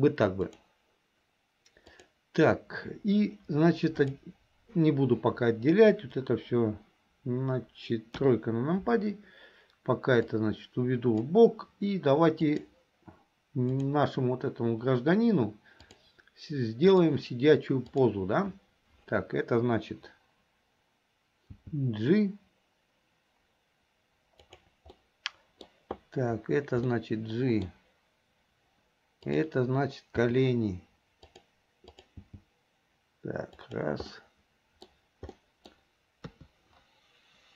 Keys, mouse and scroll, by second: 0.6 click, 1.9 click, 4.0 click, 8.2 KP_3, 10.4 click, 12.5 click, 13.9 click, 15.9-17.1 drag, 17.9 click, 21.7 g, 25.0 middle click, 26.9-27.9 middle drag, 29.3 click, 31.2 g, 31.9 click, 33.9 g, 34.2-34.9 middle drag, 35.4 scroll up 1, 35.5 middle click, 36.7 KP_3.